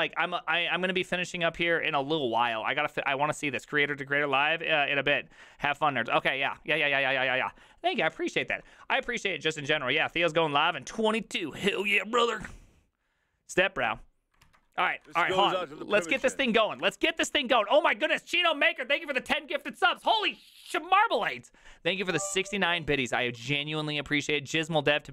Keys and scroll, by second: 15.0-17.2 typing.